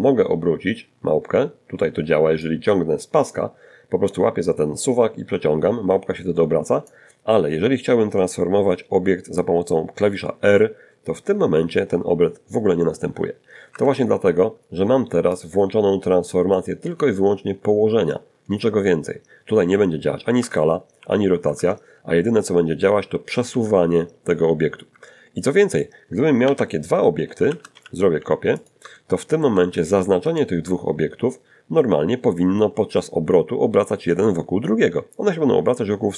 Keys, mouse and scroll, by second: 3.0-5.3 drag, 8.5 r, 11.9 Escape, 13.5 click, 17.9 s, 18.6 Escape, 19.2 r, 19.6 Escape, 21.7 g, 23.1 Escape, 23.8 scroll down 1, 24.6 1, 25.7 shift+d, 25.9 x, 26.7 ctrl+shift+click, 27.3 ctrl+shift+middle click, 28.5 shift+right click, 34.9 click, 35.7 click.